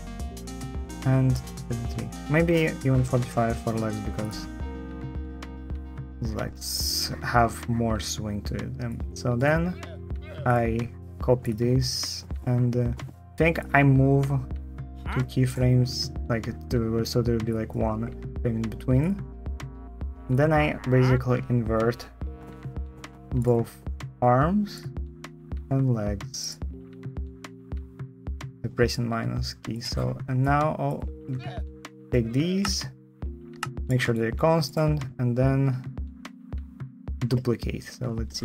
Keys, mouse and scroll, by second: 18.9 click, 22.3 -, 24.0 -, 25.4 -, 27.2 -, 32.3 shift+t.